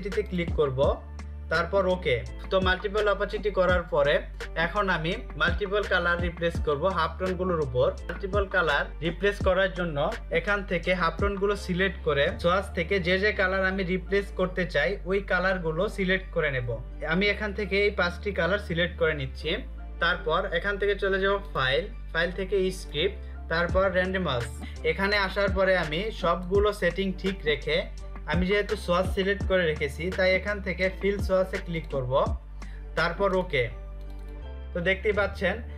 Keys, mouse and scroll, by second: 5.9 click, 20.6 click, 23.8 click, 24.8 click.